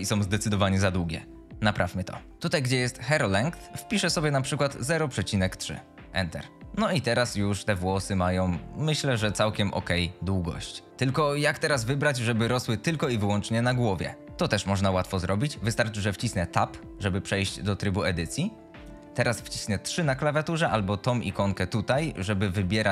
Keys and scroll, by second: 5.0 ., 5.5 KP_3, 6.0 Return, 16.9 Tab, 19.9 3.